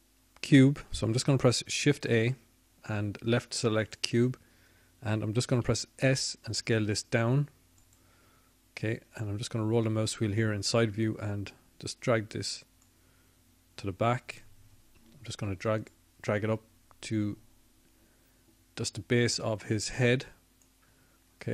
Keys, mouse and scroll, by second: 7.8 shift+a, 11.5 s, 14.0 click, 15.5 middle click, 16.7 middle click, 18.8-21.5 drag.